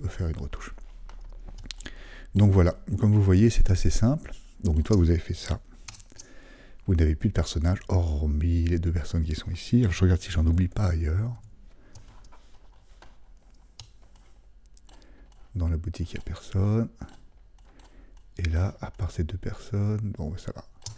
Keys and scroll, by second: 5.9 super+0.